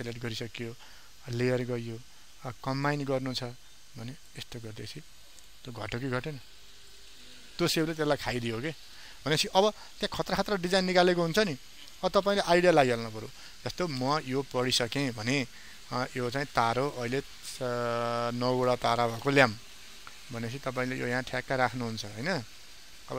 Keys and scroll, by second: 10.2 ctrl+alt+z.